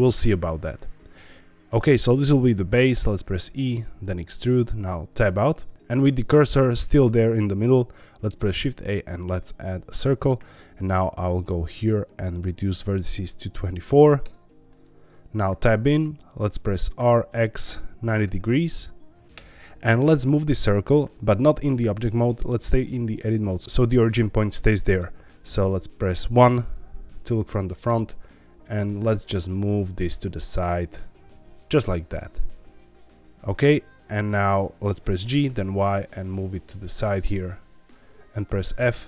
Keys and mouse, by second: 0.0 click, 0.4-1.7 middle drag, 2.9 e, 4.4 click, 5.2 Tab, 8.2 shift+a, 12.6-14.7 drag, 15.6 Tab, 16.9 r, 17.2 x, 17.7 KP_9, 19.3 KP_Enter, 25.5 KP_1, 27.8 g, 34.0 middle click, 35.2 g, 35.4 y, 37.3 click, 38.7 f.